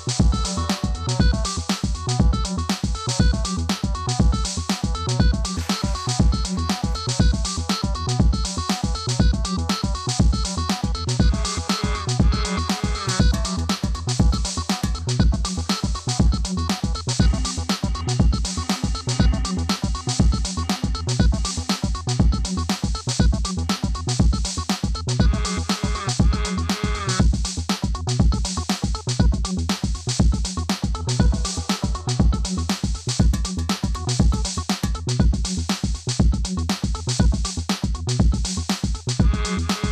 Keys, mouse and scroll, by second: 3.5 right click, 4.6 click, 4.9 ctrl+d, 5.2 click, 5.8 right click, 6.5-8.8 drag, 9.8 ctrl+d, 10.0 click, 10.8 right click, 11.5-15.0 drag, 15.8 ctrl+d, 16.1-20.6 drag, 16.8 right click, 22.9 click, 24.9-27.7 drag, 27.7-29.1 typing, 28.7-39.9 drag.